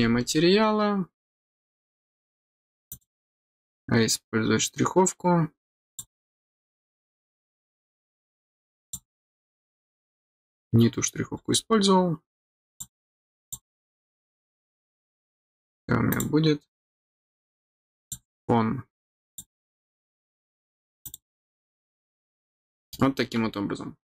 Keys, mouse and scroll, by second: 0.3 scroll down 1, 2.8 click, 5.8 click, 8.8 click, 11.2-11.7 scroll down 2, 12.6 click, 13.4 click, 14.4 middle click, 18.0 click, 19.2 click, 21.0 click, 22.3 middle click.